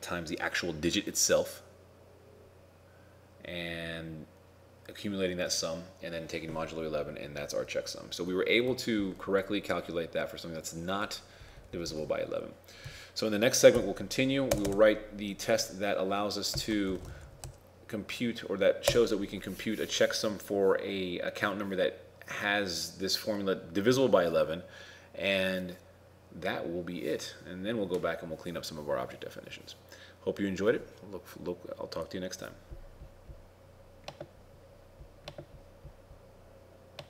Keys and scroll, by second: 8.7 ctrl+Tab, 17.0 shift+t.